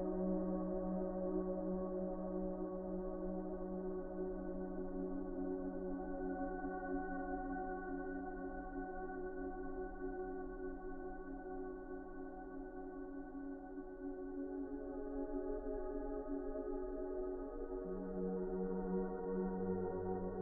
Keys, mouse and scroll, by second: 0.1 s, 3.6 F4, 5.0 F4, 5.6 g, 6.4 F4, 13.0 a, 13.4 c, 14.0 middle click, 15.2 s, 19.2 s.